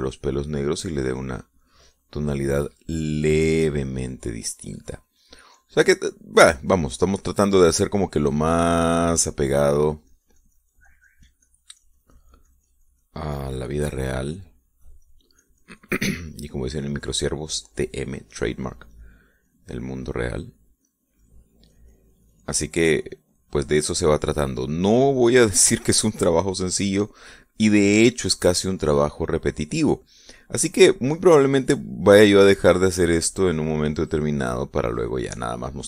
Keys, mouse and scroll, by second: 3.5 middle click, 4.3 middle click, 5.3-22.5 drag, 22.6-28.2 drag, 28.3 middle click, 29.2-33.7 drag.